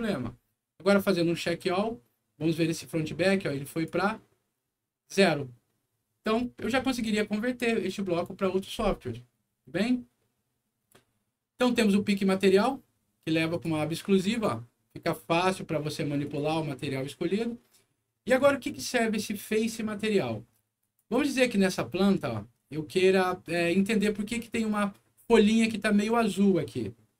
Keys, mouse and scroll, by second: 3.6 click, 6.8 click, 10.4 scroll down 1, 10.9 middle click, 12.4 click, 13.4 click, 15.2 click, 16.2 click, 17.8 middle click, 20.7 click, 21.4-22.4 scroll up 6, 22.6 middle click, 23.9 scroll up 1, 25.1 middle click, 25.7 scroll up 1.